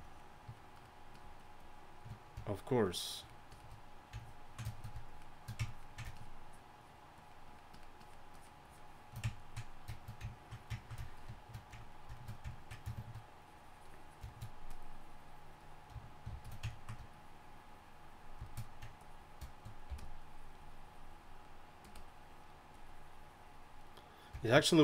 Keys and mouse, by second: 4.9-8.9 drag, 12.0-12.9 drag, 14.3-19.0 drag, 16.3 shift+f, 19.9 f, 24.0-24.7 drag.